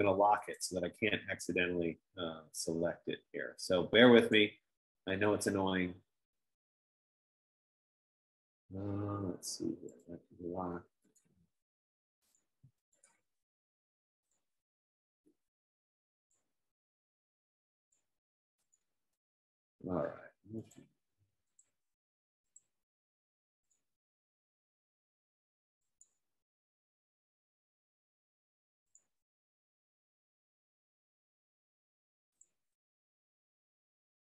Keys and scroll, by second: 21.4 F15.